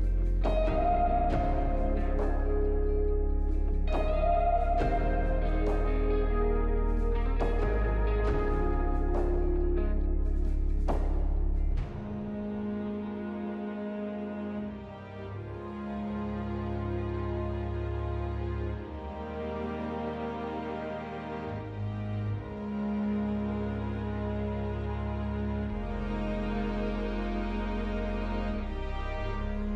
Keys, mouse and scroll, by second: 1.8 alt+middle click, 10.4 scroll down 2, 17.5 double click, 18.2 double click, 19.2 alt+middle click.